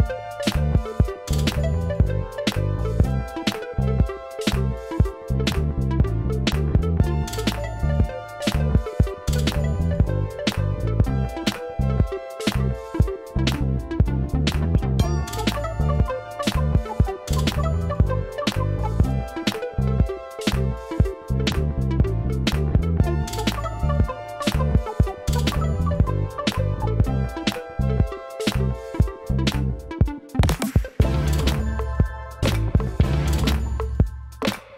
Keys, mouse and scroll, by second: 16.6 click, 19.9-23.8 drag, 23.8 right click, 24.7 click.